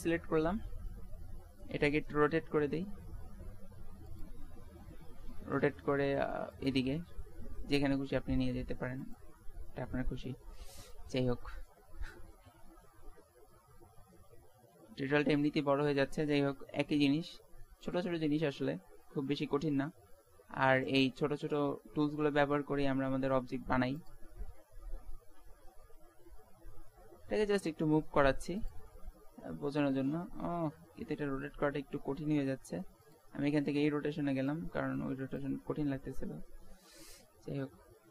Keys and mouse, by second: 0.3-1.9 middle drag, 1.9 r, 4.6 middle click, 5.3 g, 8.0 r, 10.1 g, 11.9 KP_1, 13.0 middle click, 14.7 g, 16.5 r, 18.4 middle click, 19.9 r, 21.9 middle click, 22.5-24.0 drag, 22.9 r, 25.8 g, 29.0 middle click, 31.4-32.5 middle drag, 34.4-35.9 drag, 35.9 middle click.